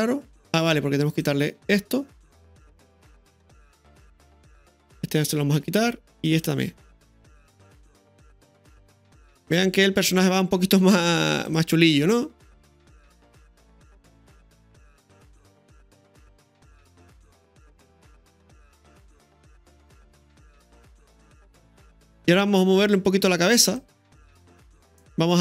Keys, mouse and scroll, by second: 1.1 right click, 3.7 right click, 5.2 right click, 5.5 Delete, 6.3 right click, 6.5 Delete, 7.2 space, 10.0-10.4 scroll down 1, 10.4 middle click, 11.4 click, 13.9-14.3 middle drag, 21.7-22.2 scroll up 2, 22.1 middle click, 22.5 space, 23.8-25.4 drag.